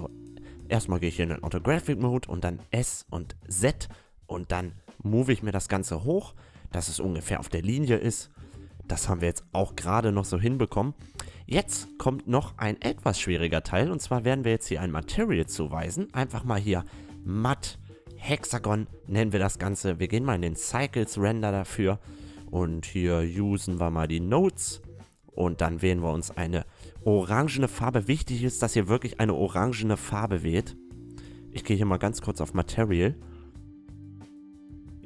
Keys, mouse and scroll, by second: 0.0 KP_1, 0.8 s, 4.3-4.9 middle drag, 4.9-6.4 drag, 6.4-7.3 middle drag, 7.3 a, 10.4-11.9 right drag, 12.2 middle click, 12.8-17.8 drag, 19.9-21.7 drag, 24.3-27.0 drag, 30.1-34.9 drag, 35.0 click.